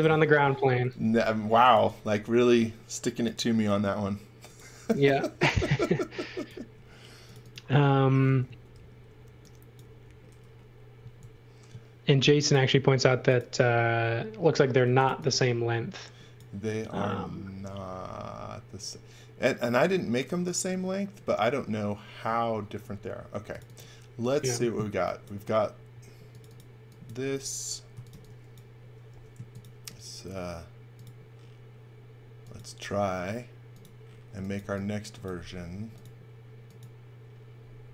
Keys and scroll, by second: 1.3-2.3 typing, 3.6 r, 6.7 space, 8.7 shift+5, 11.2 m, 14.6-15.6 typing, 17.9 x, 23.1 space, 27.7-29.1 typing, 34.1-35.7 typing.